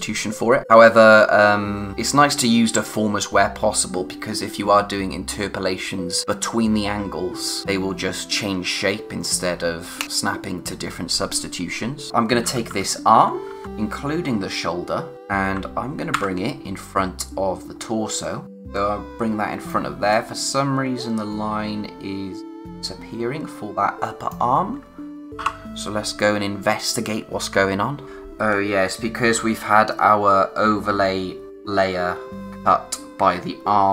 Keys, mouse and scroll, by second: 12.1 click, 12.5-13.6 typing, 14.7-15.1 scroll down 1, 17.6-18.2 scroll up 1, 18.4 click, 25.4 o, 26.0-26.3 scroll down 1, 26.3 space, 26.6 click, 26.9 space, 29.4-29.9 scroll up 1, 31.5-31.8 scroll down 1.